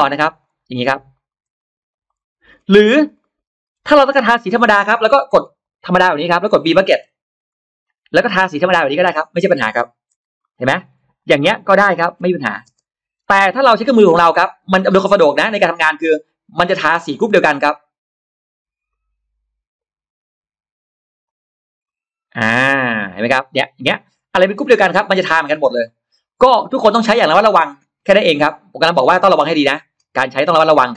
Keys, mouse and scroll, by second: 0.1 click, 0.2 click, 0.8 click, 1.0 click, 1.1 click, 1.7 click, 1.9 click, 2.4-3.8 scroll down 3, 3.1 middle click, 4.7-5.5 scroll up 4, 5.6 click, 5.8 click, 6.3 middle click, 6.9 b, 7.7 click, 7.7 b, 8.9 click, 9.1-9.4 scroll down 1, 10.3 middle click, 10.3 n, 10.6-10.9 scroll up 1, 10.6 space, 10.6 n, 10.9 Escape, 11.0 click, 11.2 click, 12.0 b, 12.1 click, 12.6 scroll down 1, 12.6 space, 12.6 b, 12.9 Escape, 13.9-14.5 scroll up 1, 15.4 click, 15.8 drag, 16.5 click, 18.7 click, 20.1 click, 21.1 click, 21.7 click, 22.3 click, 22.8 click, 24.0-24.3 scroll down 1, 24.4-24.7 scroll up 2, 25.2 scroll down 2, 25.7-26.9 middle drag, 26.9-27.4 scroll down 2, 27.1 middle click, 27.4 middle click, 27.9 scroll up 2, 28.5 click, 28.9 middle click, 30.0 click, 30.4 click.